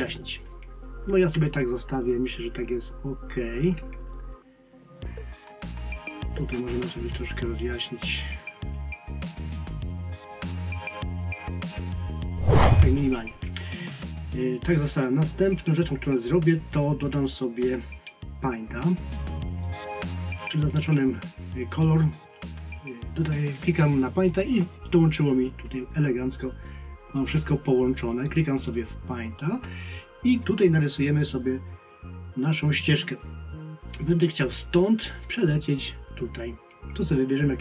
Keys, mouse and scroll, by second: 1.4 ctrl+scroll down 1, 6.6 click, 9.1 click.